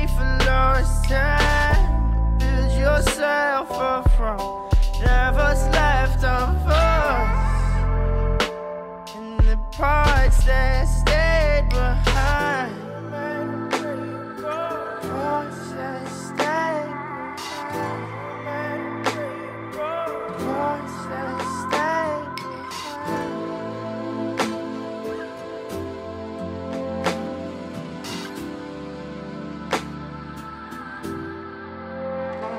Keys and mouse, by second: 0.3 click, 0.9-1.2 drag, 1.6-2.2 drag, 2.7-3.1 drag, 4.0 click, 4.6 click, 4.9-6.7 drag, 7.2 click, 7.9-9.2 drag, 9.5 click, 11.9 drag, 13.0 middle click, 13.6 middle click, 14.1 middle click, 16.1-17.5 drag, 17.5-18.6 drag, 19.1-20.1 drag, 21.0 click, 21.4 2, 21.7 right click, 21.8 click, 23.9 click, 24.6-27.0 drag, 28.0 click, 28.2-29.4 drag, 31.1 g.